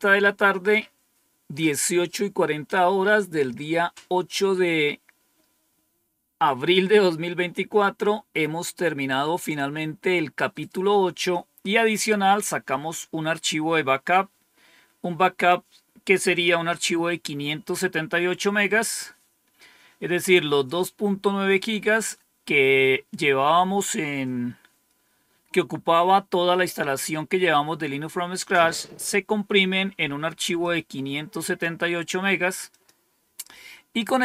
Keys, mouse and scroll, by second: 15.4-16.4 drag, 20.6-21.6 drag, 30.5-31.6 drag, 32.6 click.